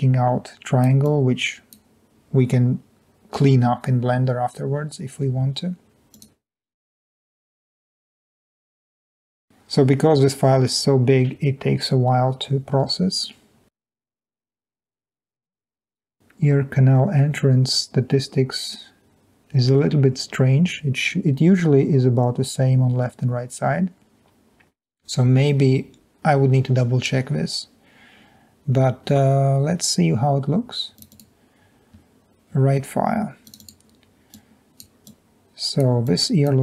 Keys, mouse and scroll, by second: 1.0 click, 1.2 click, 8.5 click, 9.0 F5, 35.0 click.